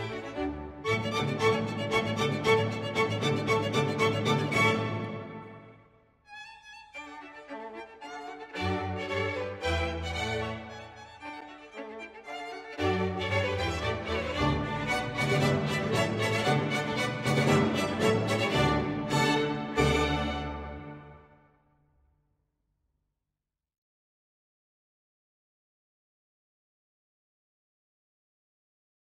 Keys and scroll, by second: 10.7 ctrl+s, 19.0 space, 21.0 space, 24.8 space, 27.1 space.